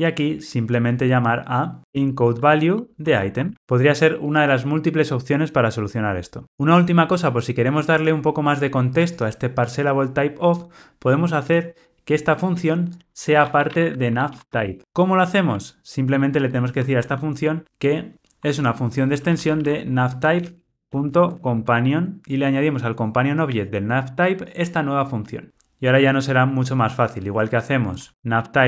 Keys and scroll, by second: 2.7 Return, 3.5 Tab, 6.4 super+z, 14.8 Escape, 22.2 Escape, 28.1 super+x.